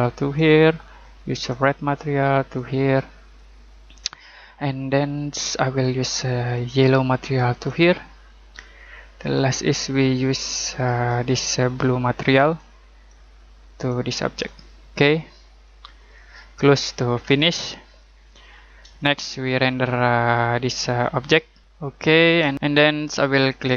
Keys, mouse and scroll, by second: 5.0 click, 17.8 scroll down 1, 18.1-18.8 scroll up 1, 18.9 middle click, 22.5 middle click.